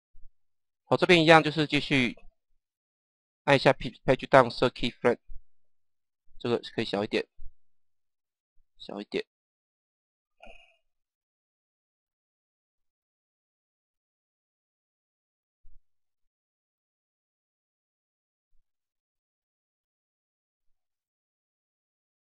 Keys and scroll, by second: 2.9 Page_Down, 8.0 Page_Down, 12.9 Page_Down, 18.1 Page_Down.